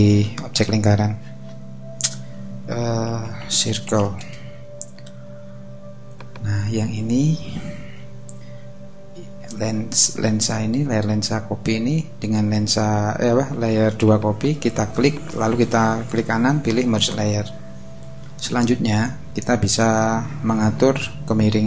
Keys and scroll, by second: 2.9-4.5 typing, 20.2 super+t.